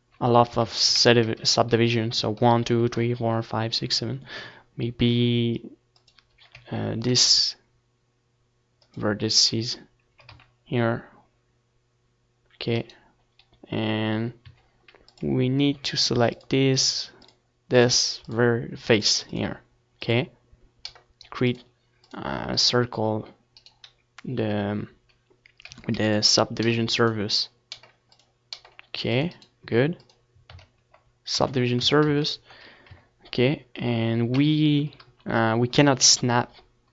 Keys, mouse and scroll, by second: 0.1 a, 0.5 ctrl+r, 5.2-6.8 drag, 5.4 a, 6.0 ctrl+r, 8.0-9.6 drag, 9.1 s, 11.8-13.4 right drag, 13.3 a, 13.9-15.7 drag, 14.4 c, 15.7 middle click, 22.3-24.0 right drag, 23.3 x, 24.0-26.4 middle drag, 24.2 c, 27.6-29.4 right drag, 28.0 x, 29.0 Tab, 29.8 ctrl+2, 30.2 Tab, 30.4 a, 31.1 a, 32.1 KP_7, 33.3 KP_3, 34.2 KP_1.